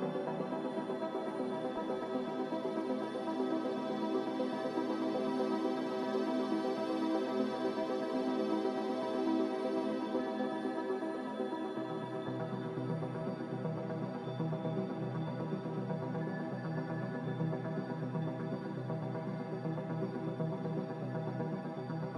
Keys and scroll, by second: 0.0-0.5 typing, 10.7 Delete, 11.7 b, 12.7 n, 13.7 ctrl+b, 16.7 a.